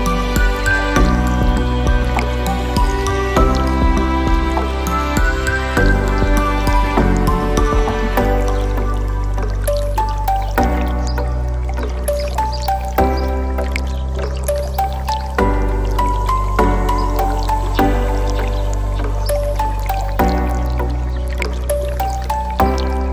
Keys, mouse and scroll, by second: 0.0 z, 1.3 click, 2.0-3.6 drag, 4.4-5.9 drag, 6.7 click, 7.8 ctrl+b, 9.3-10.7 scroll up 5, 10.8 click, 12.2 Tab, 12.7-13.8 right drag, 17.1 click, 19.1 KP_1, 19.4-20.1 scroll down 2, 20.6 click, 20.9-22.1 scroll up 2, 22.1-22.6 scroll up 1.